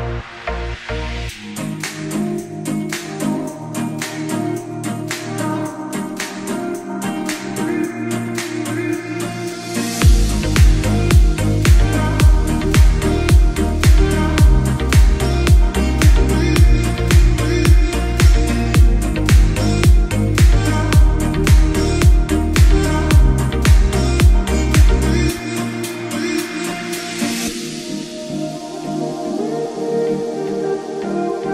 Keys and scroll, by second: 0.0 ctrl+z, 0.6 Escape, 1.2 alt+c, 1.4 alt+w, 1.7 p, 2.4 F4, 2.8 Escape, 3.1 F3, 3.4 Escape, 4.3 F2, 7.0 g, 12.6 space, 13.4 F8, 14.5 shift+l, 14.7 shift+o, 15.1 shift+g, 15.7 shift+o, 16.1 ctrl+space, 18.3 F3, 19.0 Escape, 21.6 shift+F2, 22.3 Escape, 27.0 g.